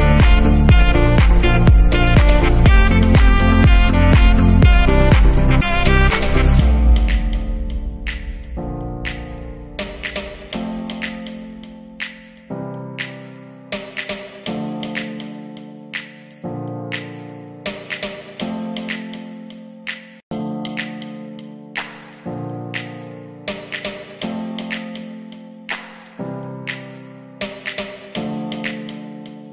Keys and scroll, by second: 0.7 Delete, 26.1 ctrl+g, 27.9 ctrl+c.